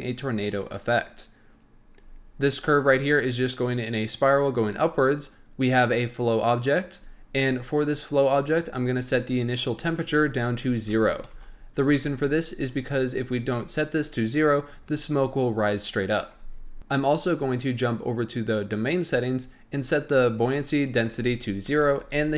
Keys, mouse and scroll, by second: 2.4 click, 5.6 click, 9.7-12.7 drag, 17.1 click, 19.2-20.8 scroll down 1, 20.8-22.3 drag.